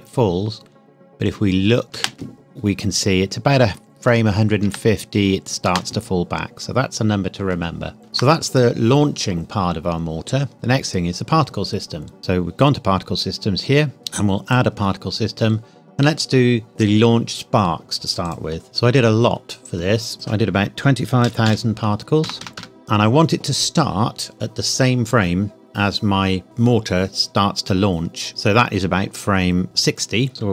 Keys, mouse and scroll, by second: 1.9 space, 4.6 space, 8.0 ctrl+s, 10.5 click, 12.2 click, 14.4 click, 18.0 click, 20.1 click, 21.2 KP_2, 21.4 KP_5, 22.2 KP_0, 30.3 click.